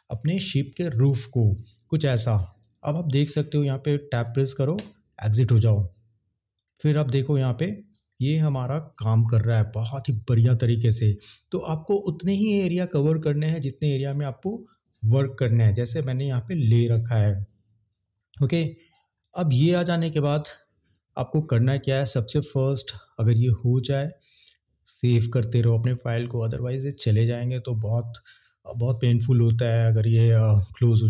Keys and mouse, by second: 6.5 click, 7.3 click, 19.2 click, 19.8 click.